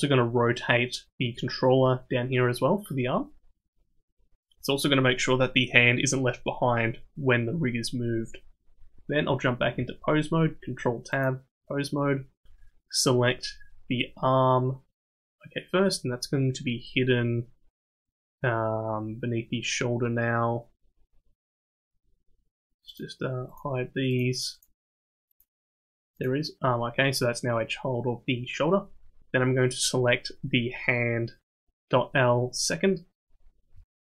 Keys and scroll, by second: 9.5 ctrl+Tab.